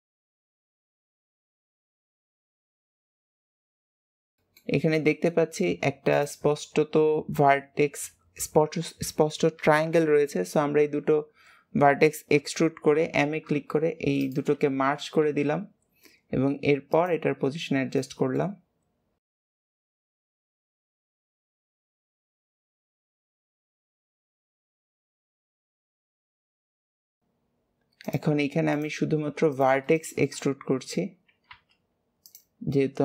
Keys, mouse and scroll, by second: 0.6 KP_3, 1.4 click, 1.9 scroll up 1, 2.0 shift+middle click, 2.5 click, 3.6 click, 3.6 g, 4.4 shift+middle click, 5.0 e, 10.7 n, 12.3 n, 17.5-17.8 scroll down 3, 17.9 shift+middle click, 18.4-19.6 scroll up 2, 19.9-20.2 scroll up 2, 20.5 click, 21.0 click, 21.4 KP_1, 21.8 scroll down 2, 22.1-22.5 scroll up 1, 22.5 click, 22.9 shift+middle click, 23.2 e, 24.1 click, 25.0 click, 27.0 click, 28.6 click, 29.4 click, 29.9-31.5 shift+middle drag, 31.5 g.